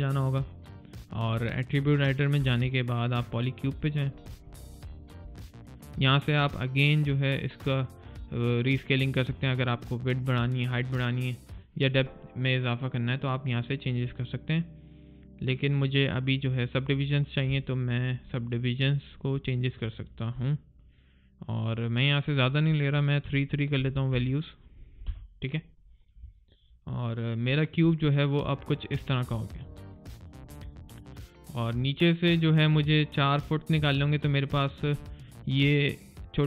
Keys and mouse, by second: 2.2 alt+click, 17.5 alt+right click, 17.8 alt+middle click, 18.1 alt+click, 18.5 alt+right click, 18.9 alt+middle click, 19.3 alt+click, 19.7 alt+middle click, 20.0 alt+right click, 20.2 alt+click, 26.2 alt+click, 26.5 alt+right click, 27.0 alt+middle click, 27.4 alt+click, 27.8 alt+middle click, 29.2 alt+right click, 29.6 alt+middle click, 29.9 alt+click, 30.4 alt+middle click, 30.7 alt+click, 31.9 alt+right click, 32.3 alt+middle click, 33.8 alt+click, 34.2 alt+middle click, 34.5 alt+click, 34.8 alt+right click, 35.1 alt+click.